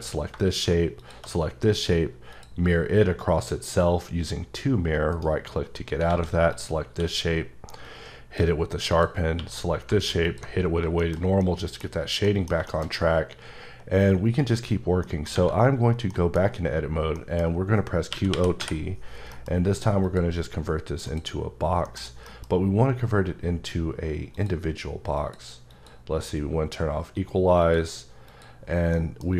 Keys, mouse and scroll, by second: 1.0 shift+click, 5.1 right click, 6.1 alt+a, 6.5 click, 6.9 q, 7.9 click, 8.9 click, 9.4 q, 10.2 alt+click, 10.7 scroll down 2, 11.0 middle click, 11.4 middle click, 11.9 scroll down 1, 12.2 middle click, 12.7 shift+middle click, 12.8-13.5 shift+scroll up 1, 13.5-14.0 scroll up 3, 15.1 middle click, 16.1 middle click, 17.1 middle click, 18.1-18.6 typing, 19.3 F9, 20.0 click, 21.1 click, 21.9 middle click, 22.3 F9, 24.4 click, 25.2 click, 25.7 click, 27.7 click, 28.3 click, 28.9 middle click.